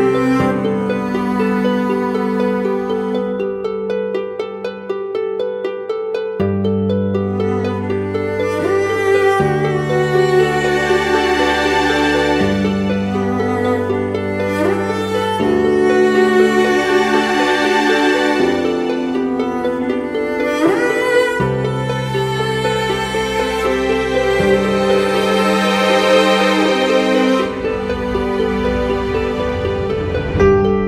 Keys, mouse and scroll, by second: 4.0 alt+shift+click, 12.4 alt+shift+click, 16.8 Down, 17.3 Left, 23.0 Return, 23.5 Left, 24.0 Down, 24.4 Left, 24.9 Left.